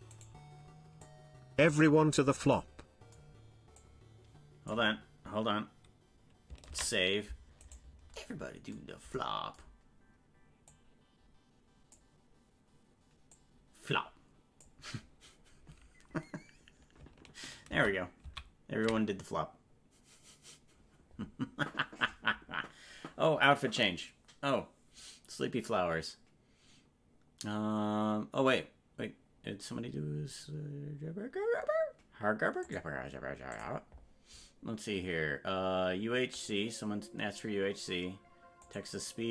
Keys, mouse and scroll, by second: 0.2 right click, 1.0-2.2 drag, 3.8 click, 7.1 ctrl+s, 7.7 right click, 10.7-11.9 drag, 13.3-14.6 drag, 17.8 ctrl+z, 18.3 ctrl+z.